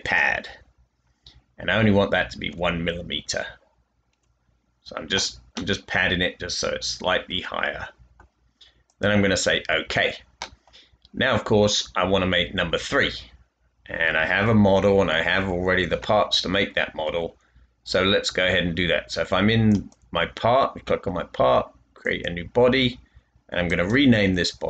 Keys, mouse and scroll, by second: 2.4 1, 4.0 Tab, 5.5-8.1 middle drag, 15.2 typing.